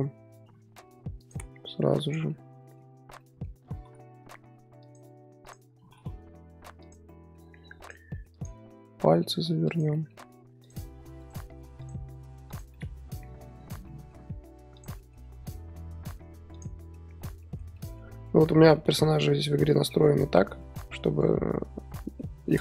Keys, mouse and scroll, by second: 0.4 r, 2.0 click, 2.3-2.9 middle drag, 2.9 scroll down 4, 3.2 middle click, 3.6 r, 5.4 click, 5.7 r, 7.0-7.8 middle drag, 7.8 click, 8.1 middle click, 8.3 click, 8.9 r, 9.9-10.6 middle drag, 10.6 click, 10.9 r, 11.8 click, 12.1 r, 12.7-13.5 middle drag, 13.5-13.8 scroll down 2, 13.8-14.7 middle drag, 14.7 click, 14.9 middle drag, 15.1 scroll down 1, 15.2-15.6 scroll up 6, 15.6 r, 15.6 r, 16.7 scroll down 1, 16.8 scroll up 1, 16.9-18.3 middle drag, 18.3-18.7 scroll down 3, 18.7-21.9 middle drag.